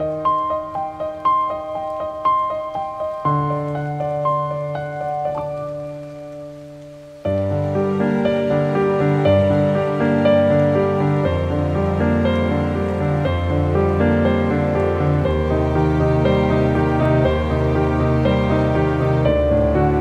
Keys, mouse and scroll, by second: 0.0-6.0 typing, 7.0 click, 9.5-14.0 typing, 14.4 click, 16.4 ctrl+t, 17.0 click, 19.4 click.